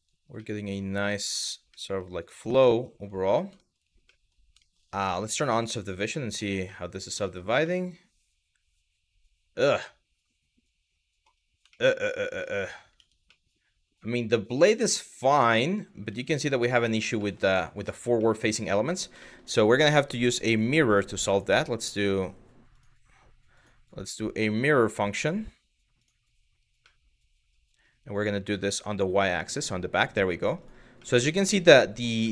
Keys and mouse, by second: 0.0 middle click, 0.8 Tab, 1.5 middle drag, 1.8 click, 2.4 shift+middle click, 3.3 middle click, 3.8 middle click, 4.3 shift+middle drag, 5.2 click, 5.8 middle drag, 6.4-6.7 middle drag, 6.9 shift+middle drag, 7.3-10.9 middle drag, 11.4 shift+middle drag, 12.6 Tab, 13.0-14.2 middle drag, 14.5 middle click, 15.0 middle click, 16.9 Tab, 16.9 middle drag, 17.9 middle click, 18.5 click, 18.9 shift+middle click, 20.5 click, 20.9-21.6 drag, 21.8 drag, 22.3 click, 23.5-25.7 drag, 26.5-27.1 middle drag, 28.1 click, 28.3 click, 28.9-29.7 middle drag, 30.2 click, 30.6-31.7 middle drag, 31.9 shift+middle drag.